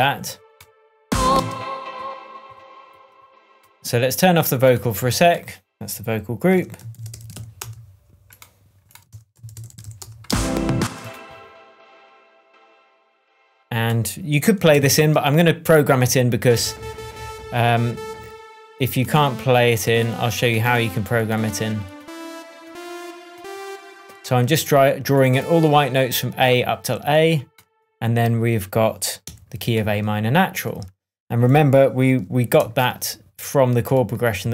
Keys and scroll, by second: 1.0 space, 6.5 super+r, 6.9-7.8 typing, 9.1 super+r, 9.3-10.3 typing, 14.7 shift+super+m, 29.2 p.